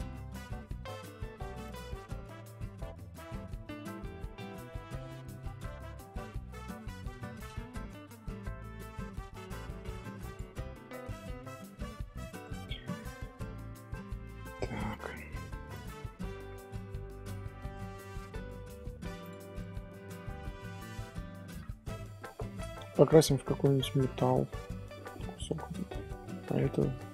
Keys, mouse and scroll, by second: 0.3 middle click, 0.6 scroll up 1, 0.8 Tab, 1.6 alt+click, 4.7 ctrl+KP_Add, 6.0 g, 10.7 scroll down 1, 10.9-12.1 middle drag, 12.1 click, 12.4 click, 17.0 scroll down 2, 17.1-18.8 middle drag, 18.8 alt+h, 19.2 click, 19.5-26.5 middle drag, 26.5-27.1 scroll up 1.